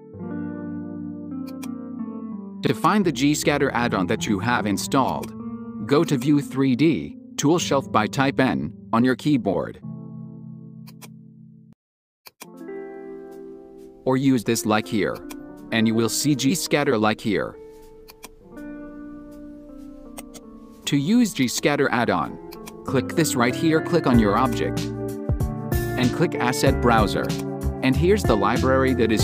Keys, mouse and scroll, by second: 0.0 s, 2.1 Tab, 2.7 click, 5.1-6.1 drag, 8.0 n, 10.8 drag, 12.3-13.0 drag, 13.0 n, 15.2-16.9 drag, 16.9 n, 18.0-20.2 drag, 20.2 right drag, 21.4-22.7 drag, 27.2 click.